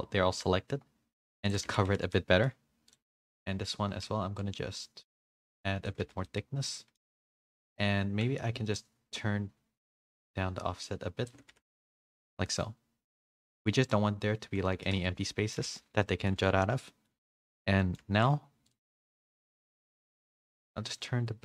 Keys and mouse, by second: 1.6 Tab, 1.9 a, 2.0 a, 2.1 middle drag, 4.4-5.9 shift+drag, 6.0 a, 6.2 a, 6.2-6.9 middle drag, 7.2 a, 7.6 click, 7.6 a, 10.2-11.3 shift+drag, 11.5 a, 11.7 a, 11.8 middle drag, 12.3 a, 12.4 a, 12.6-13.0 middle drag, 13.0 click, 13.3 middle drag, 14.8 middle drag, 15.0-17.8 typing, 15.2-15.5 middle drag, 16.0 middle click, 16.8 middle click, 17.8 middle click, 18.6 drag, 19.1 middle drag, 21.0-21.4 shift+drag.